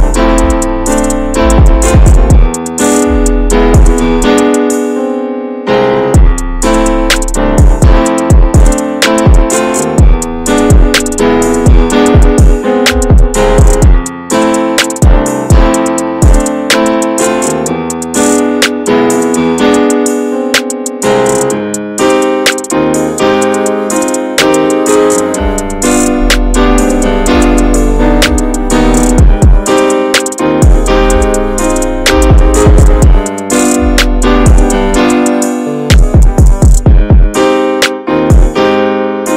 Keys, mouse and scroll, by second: 0.0 2, 0.2 click, 0.9 alt+shift+click, 1.7 ctrl+b, 7.6 click, 8.5 scroll down 3, 8.7 middle click, 9.0 Tab, 9.3 drag, 9.4 scroll down 1, 9.6-11.2 shift+middle drag, 11.2 ctrl+s, 11.4 click, 11.7-12.6 middle drag, 12.6-12.9 scroll up 1, 13.0-13.7 middle drag, 13.7 scroll down 2, 13.9-14.8 middle drag, 14.8 scroll up 1, 14.9 ctrl+s, 15.1 click, 15.2 Tab, 15.5-16.2 scroll up 2, 15.7 shift+middle click, 16.2 click, 17.0 l, 17.7 click, 18.6 l, 19.1-20.2 alt+middle drag, 20.2 click, 22.9 Tab, 23.3 Tab, 23.6 alt+z, 24.8 1, 25.2 click, 26.3 click, 27.8 alt+z, 28.1 middle click, 28.2-29.0 scroll up 4, 28.5 shift+middle click, 29.0 3, 29.3 click, 29.6 middle click, 30.1 shift+click, 30.4 middle click, 30.8 shift+click, 31.2 right click, 31.9 Tab, 32.2 click, 32.3 ctrl+a, 32.7 Tab, 33.3-36.1 right drag, 36.1 Tab, 36.2 click, 36.4 scroll down 2, 36.5 alt+middle click, 36.7 alt+middle drag, 37.1 Tab, 37.4 alt+z, 38.0 middle click, 38.4 2, 38.6 click, 38.9 click, 39.1 alt+shift+click.